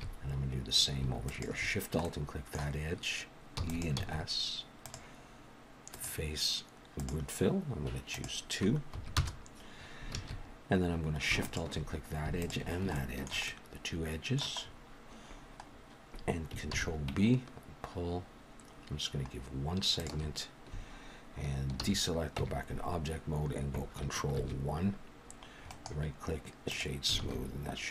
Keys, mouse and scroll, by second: 1.3 alt+shift+click, 2.0 middle click, 3.6 e, 4.0 s, 5.9 click, 8.1 click, 10.1 alt+a, 11.4 alt+shift+click, 12.9 shift+middle click, 13.5 middle click, 14.6-15.4 scroll up 1, 15.4-15.7 scroll up 3, 15.7 scroll down 2, 16.7 ctrl+b, 21.8 alt+a, 22.4 Tab, 24.4 ctrl+1, 25.7 right click, 27.2 alt+a, 27.4-27.9 scroll down 1.